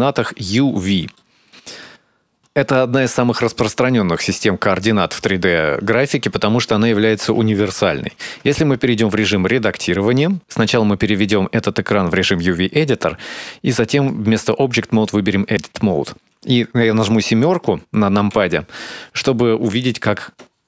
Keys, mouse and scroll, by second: 1.5 shift+middle click, 2.8 click, 11.0 click, 14.9 click, 19.3 KP_7.